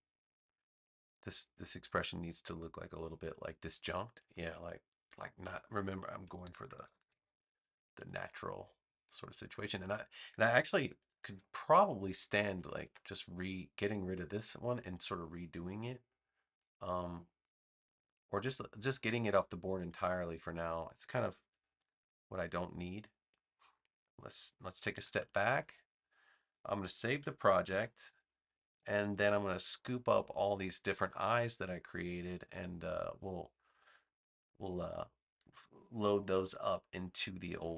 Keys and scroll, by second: 6.4 super+-, 8.7 space, 11.0 super+=, 12.4 space, 21.7 BackSpace, 22.9 space, 24.9 super+-, 27.6 super+s, 29.2 space.